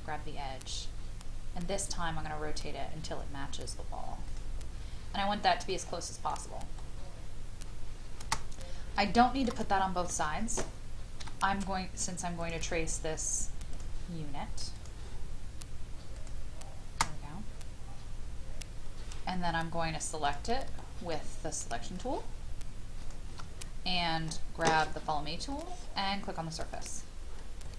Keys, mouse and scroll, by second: 4.7-5.7 scroll down 2, 5.7 middle click, 6.5-8.0 scroll down 1, 8.5 space, 8.8 scroll down 1, 9.1 shift+middle click, 9.6 middle click, 11.2 |, 12.4 click, 17.5-18.8 scroll up 1, 18.8-20.2 scroll down 1, 20.2 click, 20.8 shift+middle click, 21.9 shift+click, 23.0 shift+click, 23.5-25.5 scroll up 1, 25.5 click, 27.4 scroll down 1.